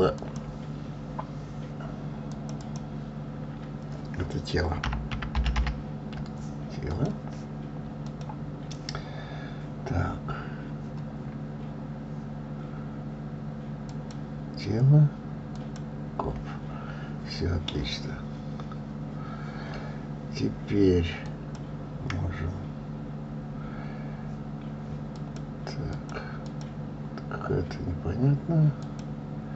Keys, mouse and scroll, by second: 0.5 click, 2.6 click, 2.9-5.9 drag, 8.3 click, 11.5-14.1 scroll down 3, 14.1 scroll down 1, 14.2 click, 15.9 click, 21.6 click, 25.5 click, 26.2 click, 26.7 click, 29.1 click.